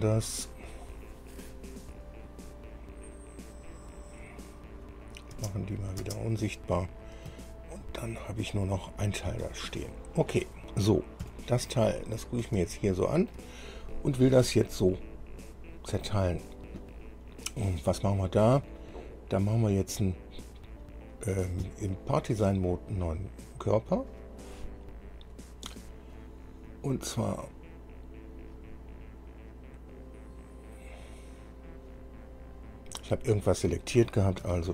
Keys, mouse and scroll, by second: 1.6-1.9 scroll down 2, 3.9-4.2 scroll down 2, 5.2 click, 5.5 space, 6.0 click, 6.9 scroll down 2, 7.5-8.6 shift+middle drag, 9.5 scroll up 2, 10.0 scroll down 2, 11.4 KP_1, 12.3 scroll down 2, 12.9 shift+middle click, 26.3 click, 32.5-32.9 scroll down 2.